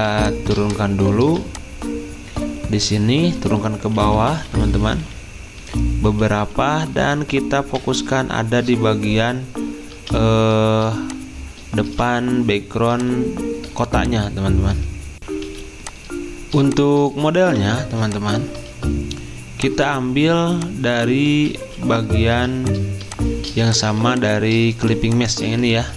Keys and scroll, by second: 1.2 v, 3.9 ctrl+[, 4.1 ctrl+[, 4.3 ctrl+[, 9.9 z, 11.6-12.4 typing, 15.1 alt+Tab, 15.1 F9, 15.5 z, 18.7 ctrl+z, 21.3 ctrl+z, 21.5 ctrl+z, 22.3 z, 25.3-25.9 typing.